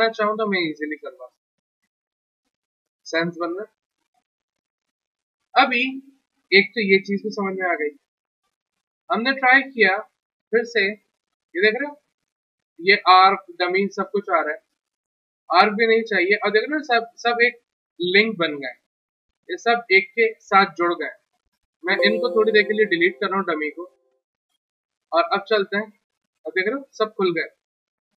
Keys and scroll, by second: 2.2 ctrl+z, 23.9 Delete.